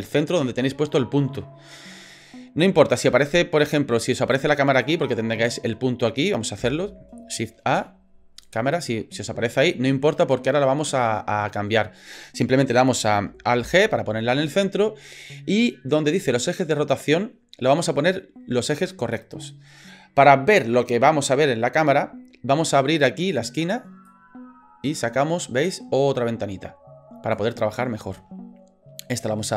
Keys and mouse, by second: 4.2 click, 4.8 click, 6.6 Delete, 7.7 shift+a, 13.6 alt+g, 24.0-27.4 drag.